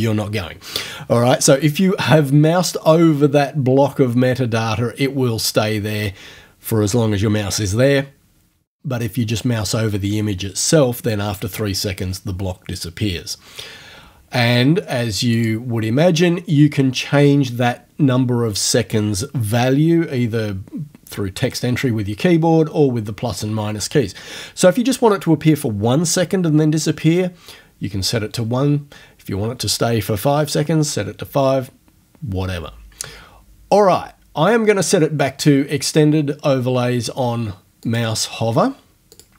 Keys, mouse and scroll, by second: 15.4 click, 37.8 click, 39.2 click.